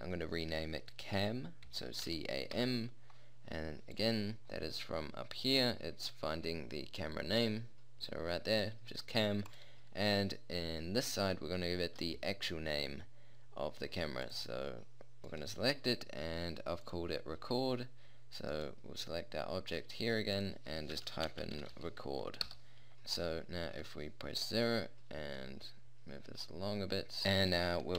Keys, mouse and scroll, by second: 14.7-15.3 middle drag, 22.9 KP_0.